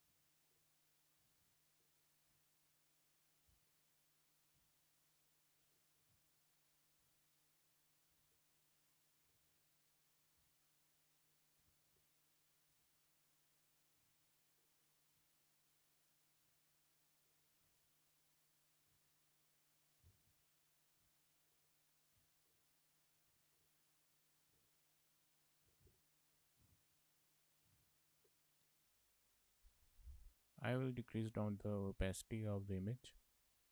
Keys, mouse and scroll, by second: 0.6 k, 10.0 k, 11.3 k, 17.4 k, 20.7 k, 22.0 k, 22.5 k, 23.9 k, 26.6 z, 28.4 z, 28.6 click, 29.7 Tab, 31.4 click, 32.4 click.